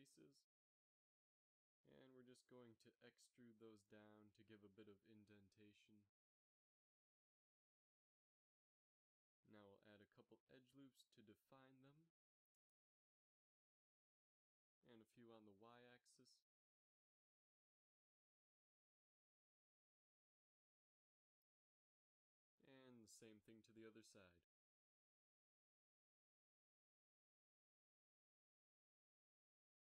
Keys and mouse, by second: 2.4 KP_3, 3.5 x, 4.3 z, 4.9 e, 8.1 KP_7, 8.6 z, 11.1 ctrl+r, 12.7 s, 15.6 ctrl+r, 17.1 s, 22.9 ctrl+r, 24.3 s, 28.8 a.